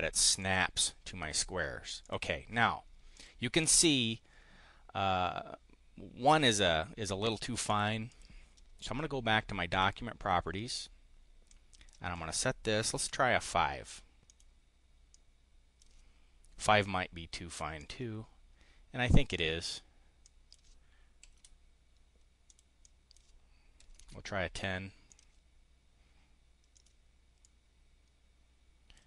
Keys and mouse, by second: 1.9 click, 3.1 click, 8.0 click, 9.6 click, 11.5 click, 12.9 5, 14.2 click, 15.0 click, 16.5 5, 17.7 click, 20.2 click, 20.9-21.8 typing, 22.4 click, 22.8 click, 23.4-24.3 typing, 25.0 click, 26.6 click, 27.2-29.0 drag.